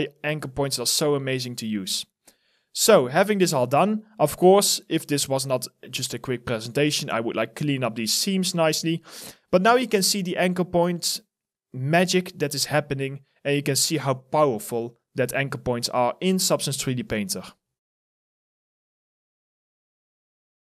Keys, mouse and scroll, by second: 4.5 alt+middle click, 5.2 alt+right click, 6.8 alt+click, 8.9 alt+right click, 9.3 alt+click, 9.9 alt+middle click, 10.8 alt+right click, 11.6 alt+click, 12.2 alt+middle click, 13.2 alt+right click.